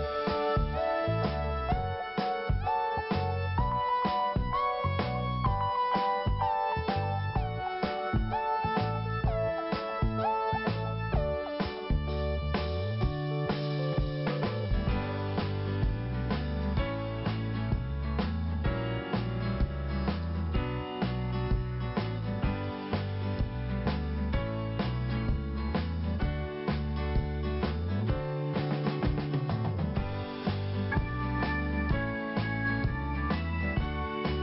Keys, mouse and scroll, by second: 2.6 click, 4.0 click, 6.0 click, 6.1 click, 7.3 click, 7.4 click, 8.1 click, 9.0 click, 12.0 click, 12.2 click, 13.7 click, 13.8 click, 14.7 scroll up 1, 17.5 click, 17.6 click, 21.8 shift+Return, 22.5 shift+Return, 23.0 shift+Return, 24.2 click, 25.1 click, 26.4 click, 26.7 click, 28.1 double click, 29.3 scroll down 1, 30.0-30.4 scroll up 1, 33.1 click.